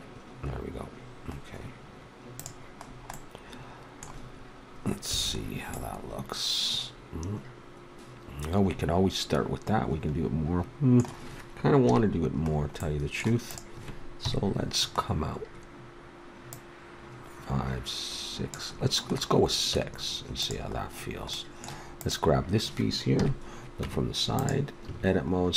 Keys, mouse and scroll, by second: 3.1-5.0 middle drag, 5.1 a, 5.7-7.8 middle drag, 11.8 KP_3, 13.5-15.2 right drag, 14.1 KP_3, 17.4-18.4 drag, 19.7 Tab, 22.0-23.1 right drag, 23.1 KP_3, 23.8 Tab, 24.8 a.